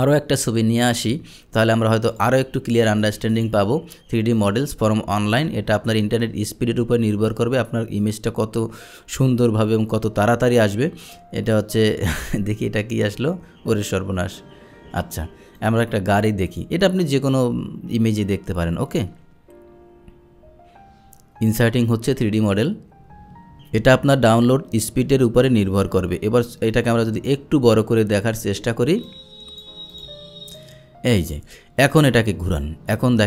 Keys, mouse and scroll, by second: 0.8 click, 1.3 Delete, 1.7 Delete, 2.1 Delete, 2.1 click, 3.3 click, 4.4 click, 11.1 click, 15.7 click, 16.5 click, 26.7-28.2 drag, 29.1-29.7 drag, 30.0 click, 30.6 click, 32.1-33.2 drag.